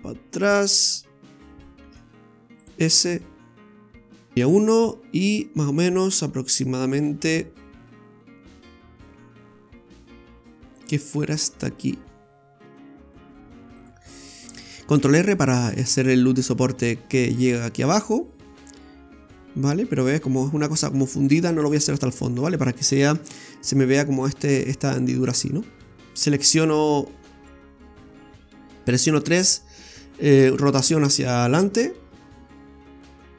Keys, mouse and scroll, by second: 1.0 middle click, 1.8 shift+s, 2.9 s, 4.4 KP_1, 5.2 e, 14.3 scroll down 1, 14.4 middle click, 14.9 ctrl+r, 21.6-23.1 scroll up 5, 23.1 Tab, 23.1 scroll up 1, 25.9 Tab, 26.0 scroll down 1, 26.1 right click, 26.6 right click, 27.0 shift+right click, 27.5 middle click, 30.5 r.